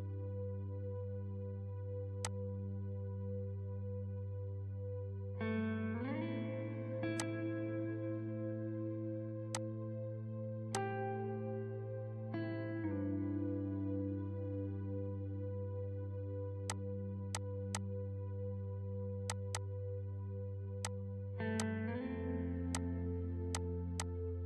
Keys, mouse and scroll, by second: 1.8 ctrl+space, 2.2 click, 3.8 ctrl+z, 4.9 click, 6.2 ctrl+z, 7.2 click, 8.3 ctrl+z, 8.8 space, 9.5 click, 10.4 ctrl+space, 10.7 click, 11.4 ctrl+z, 16.6 shift+click, 17.7 click, 18.8-19.2 scroll down 1, 19.2 click, 21.2 scroll up 1, 21.6 shift+click.